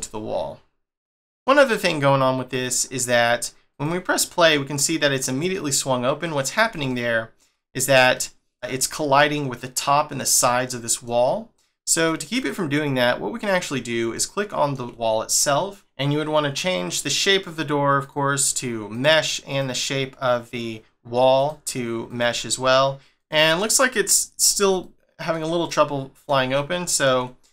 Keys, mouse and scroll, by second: 1.2 scroll up 2, 1.3 middle click, 2.0 click, 2.8-3.7 scroll down 1, 3.7 click, 5.0 middle click, 6.2 middle click, 7.5 scroll up 1, 8.1 middle click, 10.4 middle click, 11.9 click, 12.3 click, 13.4 click, 14.1 shift+middle click, 18.0 click, 19.5 click, 21.3 click, 23.1 middle click, 23.6 middle click, 24.1-24.5 scroll up 7, 24.8 shift+middle click.